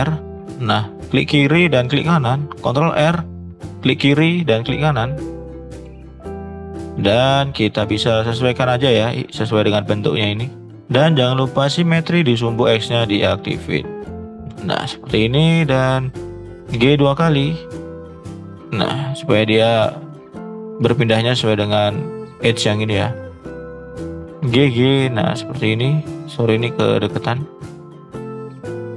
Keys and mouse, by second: 2.6 ctrl+r, 6.1 shift+middle click, 6.9 shift+middle click, 7.5 shift+middle click, 12.2 click, 14.6 shift+middle click, 15.4 click, 16.7 g, 21.6 shift+middle click, 23.8 g, 26.4 click, 27.2 g.